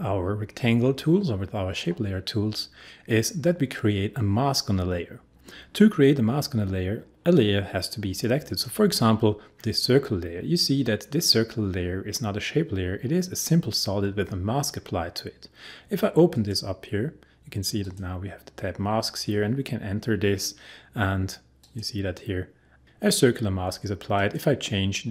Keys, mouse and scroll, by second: 8.5 click.